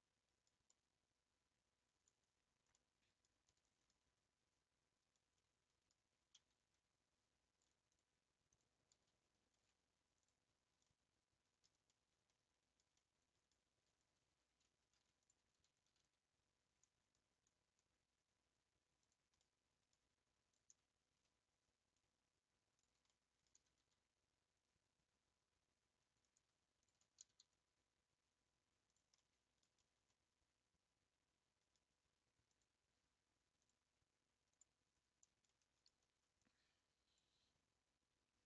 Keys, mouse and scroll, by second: 0.0 middle click, 0.6 scroll down 1, 0.7-2.2 middle drag, 2.2-2.7 scroll down 2, 2.7-4.6 middle drag, 4.6-5.4 scroll up 2, 5.4-7.1 middle drag, 7.1 3, 7.9 alt+click, 8.5 alt+click, 9.5 ctrl+v, 10.8-14.4 middle drag, 14.4 1, 15.2 alt+click, 15.9 alt+g, 19.5-20.5 middle drag, 20.5 click, 21.7-22.0 scroll up 2, 22.8 shift+click, 23.2 middle click, 23.6 g, 26.8 shift+click, 27.3 g, 29.2-32.5 middle drag, 32.5 click, 33.6 click, 34.5 click, 35.0 scroll up 3, 35.6 shift+middle click, 36.5 click.